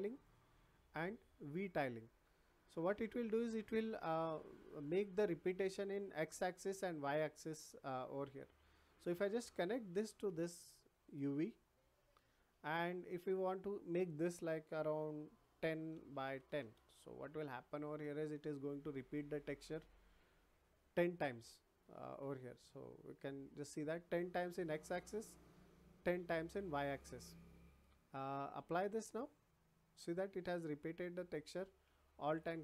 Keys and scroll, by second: 15.4 1, 15.9 Tab, 16.2 1, 16.6 Tab.